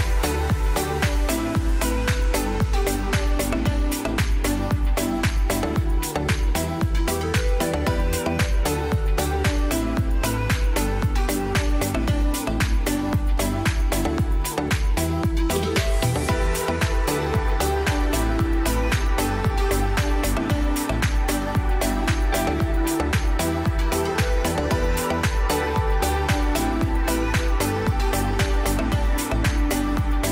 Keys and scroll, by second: 0.7 ctrl+z, 5.1 shift+F2, 5.3 F3, 8.8 shift+F2, 12.1 F4, 12.6 Escape, 13.8 ctrl+z, 15.0 ctrl+Page_Down, 19.8 shift+F2, 21.5 shift+Page_Up, 21.8 F3, 28.3 ctrl+z, 28.6 space, 28.7 F3, 29.3 F4, 29.9 Escape.